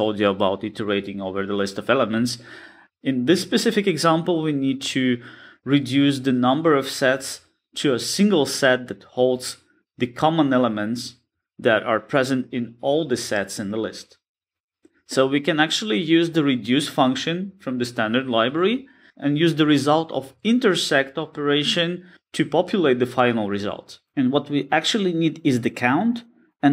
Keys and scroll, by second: 13.7 alt+shift+Right, 14.8 shift+F6, 19.6 Return, 22.1 alt+shift+Left, 24.2 ctrl+shift+j, 25.2 Return, 25.6 alt+shift+Right.